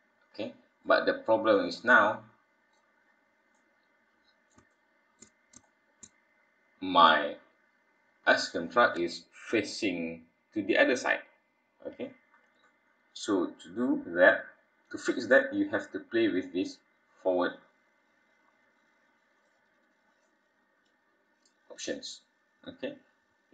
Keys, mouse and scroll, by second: 0.6 scroll up 3, 1.4 scroll up 4, 1.7 middle click, 2.9-3.5 scroll up 3, 3.5 middle click, 4.7 shift+middle click, 5.6 middle click, 6.3 scroll down 3, 11.8-13.2 scroll down 11, 13.8-14.4 scroll down 4, 19.4 click.